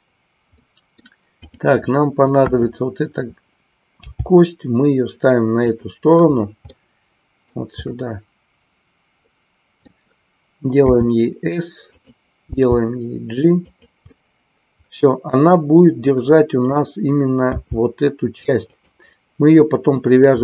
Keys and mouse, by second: 0.5 middle click, 1.4 click, 2.4 KP_1, 4.1 g, 6.8 middle click, 7.9-9.9 middle drag, 11.9 click, 13.8 click, 14.2-16.8 middle drag, 18.7 click.